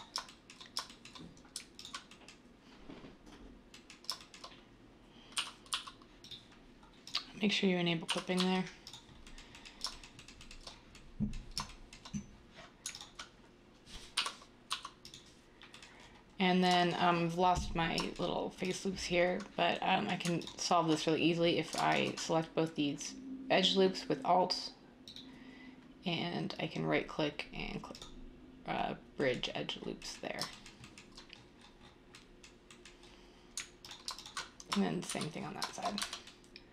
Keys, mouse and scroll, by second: 5.3-5.6 typing, 8.0 typing, 14.1-14.6 typing, 35.0 r, 36.0 Tab.